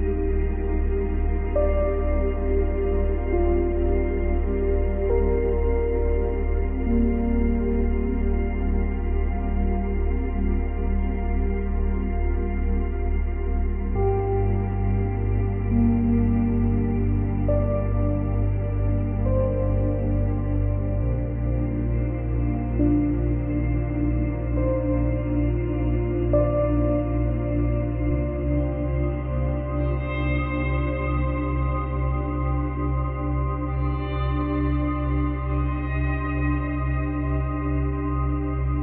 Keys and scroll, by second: 10.8 space, 11.7 space, 33.7 space, 34.5 space.